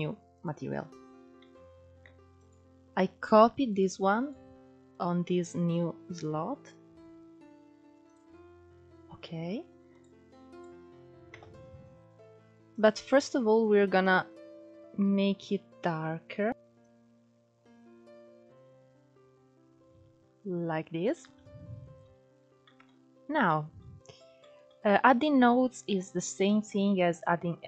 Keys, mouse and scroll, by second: 0.0 click, 0.0 3, 0.9 Tab, 1.9-5.5 drag, 7.7-9.1 drag, 9.6 click, 10.1-10.8 drag, 10.8 KP_0, 13.6 click, 16.5 click, 25.9-27.6 middle drag.